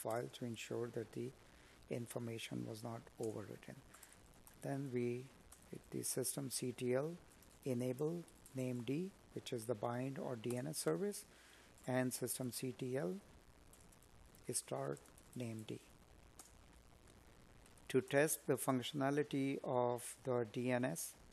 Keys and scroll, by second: 0.9 space, 3.1 space, 9.0 space, 10.1 space, 18.7 space.